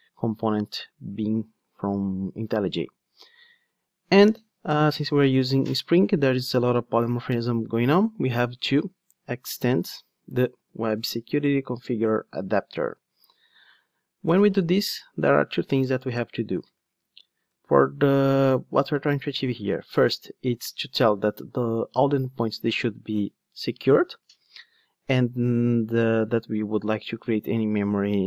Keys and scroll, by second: 9.6 Return.